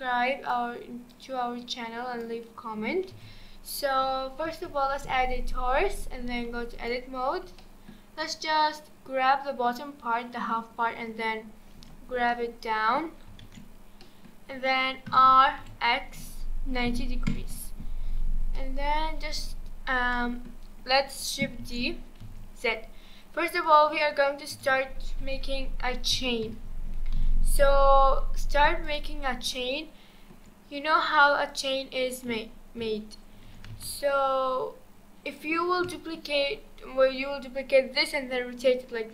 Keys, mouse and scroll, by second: 1.1 click, 3.1 g, 7.2-7.6 scroll down 2, 7.6-10.7 shift+middle drag, 11.7 Tab, 12.0 scroll down 2, 12.3-13.4 middle drag, 13.4 alt+z, 13.7 scroll up 2, 14.0-15.1 middle drag, 15.1 r, 17.8-18.5 scroll up 1, 18.5-19.0 middle drag, 19.0-20.1 scroll down 2, 20.1-21.6 middle drag, 21.6 shift+d, 24.5 r, 27.2 g, 29.2-29.5 scroll down 2, 29.5-31.5 shift+middle drag, 31.5 click, 32.3 a, 33.3 shift+d, 35.6 scroll down 2, 35.9-36.2 shift+middle drag, 36.2-37.0 shift+scroll down 1.